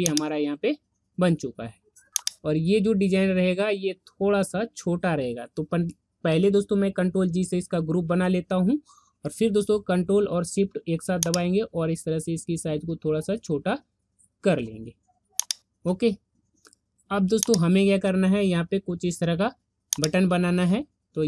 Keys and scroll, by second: 7.0 ctrl+g.